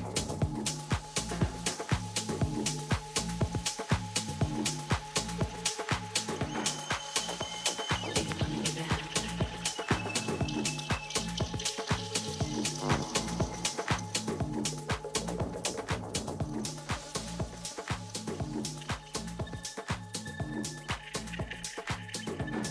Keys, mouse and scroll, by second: 1.4-3.3 drag, 3.4-5.2 drag, 5.2-7.1 middle drag, 6.7 Tab, 7.4 Tab, 9.0 t, 10.1-12.1 drag, 11.1-13.0 middle drag, 14.1-20.1 middle drag, 16.8 Tab.